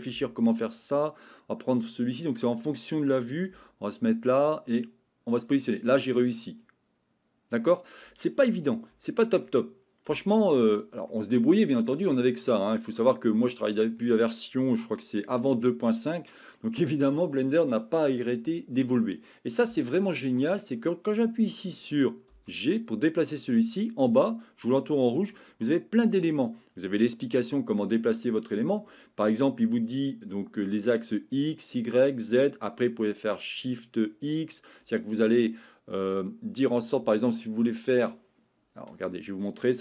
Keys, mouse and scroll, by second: 0.1 g, 0.8 click, 2.3 middle click, 3.5 g, 5.5 click, 6.0-8.4 middle drag, 9.0 shift+middle click, 10.1 g, 10.7 click, 11.2 middle click, 16.6 middle click, 22.3 g, 39.6 Escape.